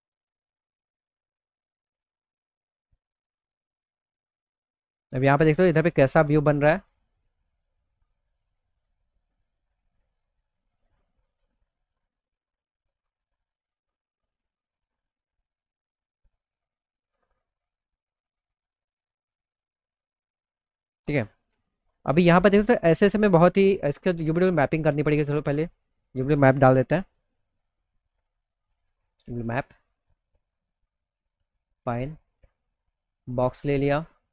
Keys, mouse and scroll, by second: 0.9 click, 3.4 middle click, 3.9-5.0 alt+middle drag, 5.2 middle click, 5.8 middle click, 8.4 click, 9.3 click, 9.7 click, 10.0 click, 10.2-11.7 scroll, 10.9 click, 10.9 click, 11.9 click, 12.4 middle click, 12.7 middle click, 13.1 middle click, 13.3 middle click, 13.4 alt+middle click, 15.3-17.0 drag, 18.6 middle click, 18.9 middle click, 19.2 middle click, 20.1 middle click, 20.5-21.6 alt+middle drag, 23.6 click, 25.5 click, 27.0 u, 28.1 click, 29.9 click, 30.4 click, 32.5 click, 33.2 middle click, 34.2 click, 34.2 right click.